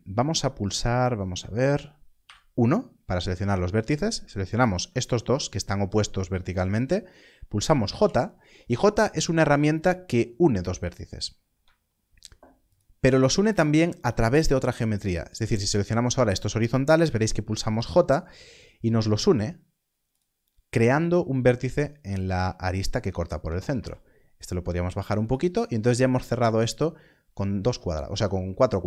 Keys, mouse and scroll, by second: 2.1 1, 3.2 click, 4.5 shift+click, 12.6 j, 13.4 shift+click, 17.7 j, 21.8 j, 21.9 scroll up 1, 23.6 g, 23.7 z, 25.2 click, 26.7-27.3 scroll down 1.